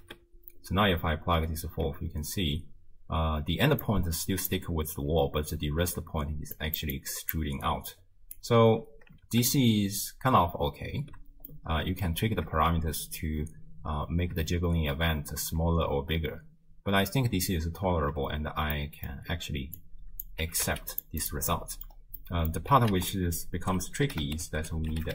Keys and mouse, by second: 0.1 shift+space, 1.7 shift+space, 2.3 space, 3.6-9.3 typing, 3.9 click, 6.6 click, 7.3 click, 8.0 right click, 11.3 space, 11.6-12.2 drag, 12.3 shift+space, 14.2 shift+space, 15.4 space, 16.0 space, 17.3 space, 18.0 shift+space, 18.8 middle click, 19.9 click, 20.5 g, 21.2 click, 21.5 middle click, 22.2 middle click, 23.0 ctrl+a.